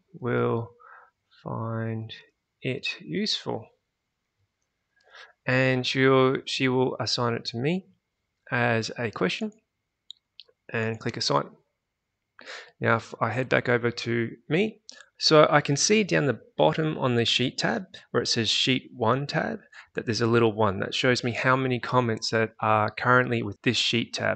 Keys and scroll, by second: 0.0-5.4 typing, 13.4 alt+Tab.